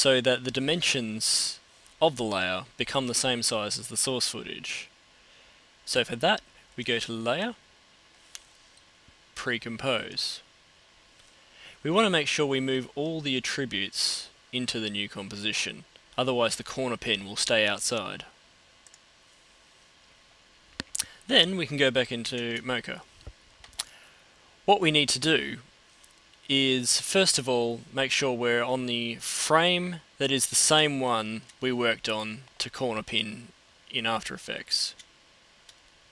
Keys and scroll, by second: 34.0 super+Tab.